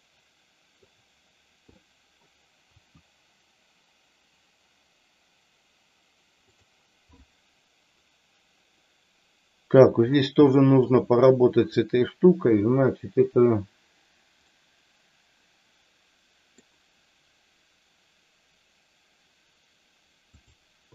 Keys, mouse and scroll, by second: 1.7 middle click, 2.7 r, 6.4 click, 7.2-9.7 middle drag, 10.5 shift+middle click, 14.4-16.6 middle drag, 20.3 click.